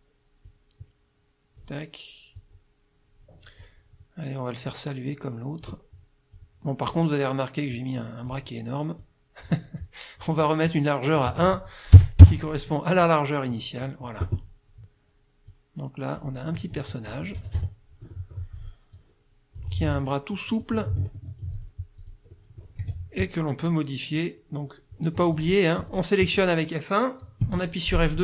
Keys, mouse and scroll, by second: 0.5-1.8 drag, 2.4-3.8 drag, 4.7-5.8 drag, 6.4 click, 7.8 click, 9.0 click, 11.2 click, 12.0 KP_1, 12.2 KP_Enter, 13.5 click, 15.5 click, 16.8 F1, 17.6 KP_Subtract, 18.1 click, 19.0 click, 20.6-21.9 ctrl+drag, 22.0 ctrl+click, 22.4 ctrl+click, 22.8 F2, 25.2 F1, 25.4 click, 25.9 click, 27.4 F2.